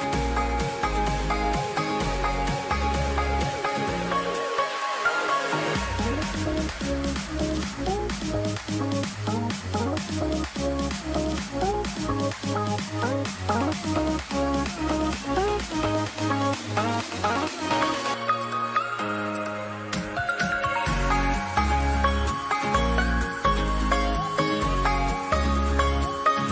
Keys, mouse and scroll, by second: 3.0 Return, 10.2 click, 13.9 Return, 14.2 F5.